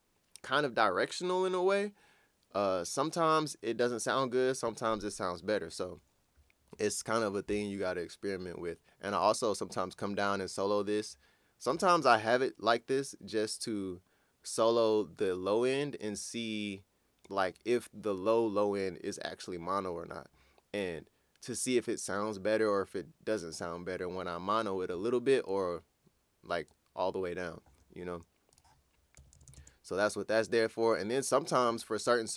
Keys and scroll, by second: 29.1-30.0 typing.